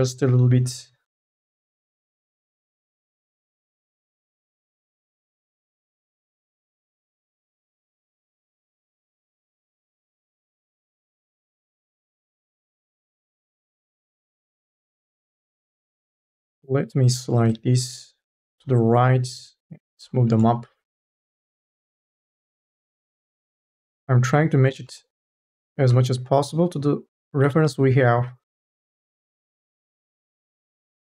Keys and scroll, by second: 5.0 ctrl+z, 6.2 3, 7.4 2, 14.1 ctrl+z, 16.2 ctrl+z, 17.3-19.6 typing, 26.0 2.